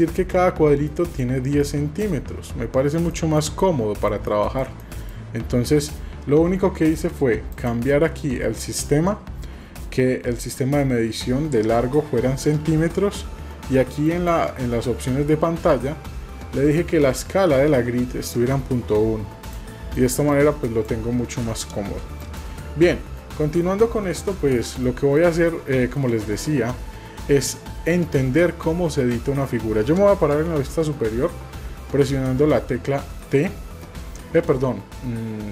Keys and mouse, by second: 1.0-1.3 shift+drag, 1.7-2.0 shift+drag, 3.2 shift+middle drag, 3.7-4.1 middle drag, 4.4 shift+middle drag, 4.9 middle click, 7.5 click, 14.0-19.5 drag, 20.0-20.3 shift+middle drag, 20.6 drag, 22.3 drag, 23.1-23.6 shift+middle drag, 23.8-24.2 middle drag, 24.6 shift+middle click, 25.2 middle click, 29.1 middle click, 30.6 KP_7, 33.2-33.8 shift+middle drag.